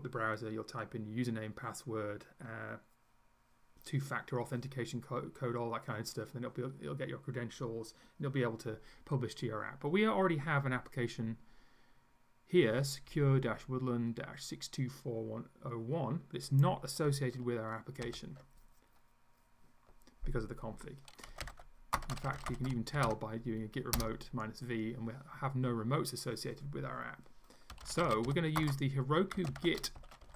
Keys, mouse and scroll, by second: 16.5 click, 18.0 ctrl+u, 21.1-23.5 typing, 24.0 Return, 27.5-30.3 typing.